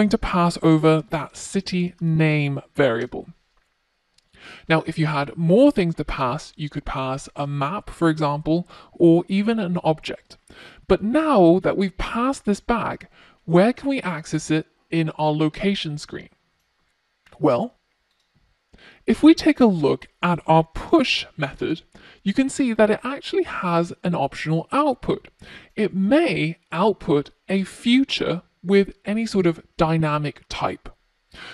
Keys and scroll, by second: 21.9 F1.